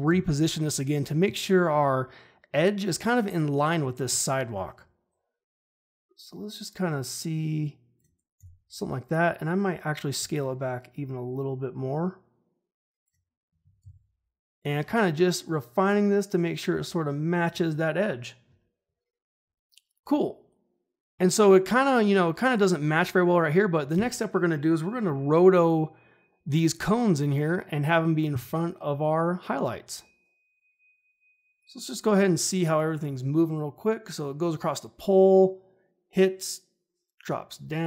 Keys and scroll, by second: 0.0 r, 8.3 s, 13.8 r.